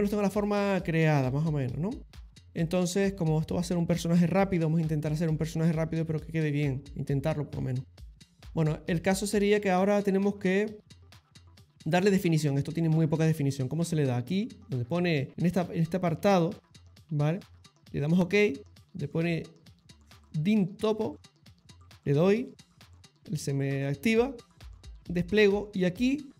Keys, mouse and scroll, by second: 0.0 ctrl+middle click, 0.2 ctrl+middle click, 0.5 middle click, 0.9 middle click, 2.2 ctrl+middle click, 13.9 middle click, 14.4 middle click, 15.3 click, 23.9 click, 25.8 click.